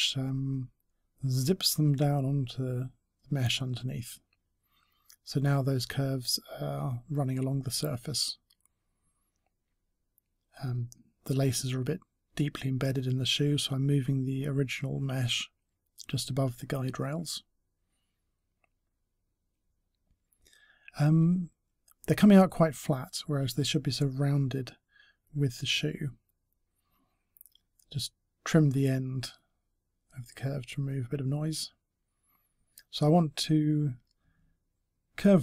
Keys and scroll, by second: 33.8 s, 35.1 s.